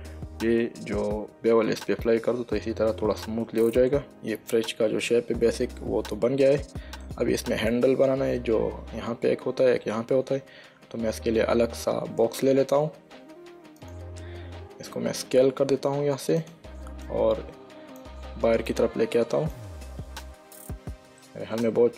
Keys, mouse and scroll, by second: 4.1 middle click, 11.6 shift+a, 14.1 click, 15.6 s, 16.7 click, 19.0 click, 21.5 shift+middle click.